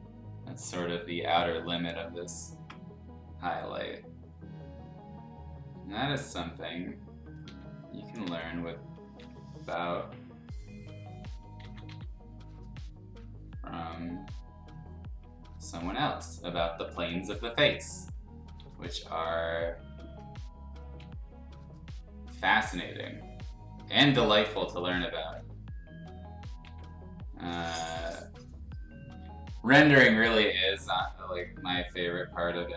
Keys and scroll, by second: 7.4 x, 8.2 z, 9.2 ctrl+z, 11.6 ctrl+z, 11.9 x, 18.6 x, 21.0 x, 24.4 ctrl+z, 25.3 x, 26.6 x.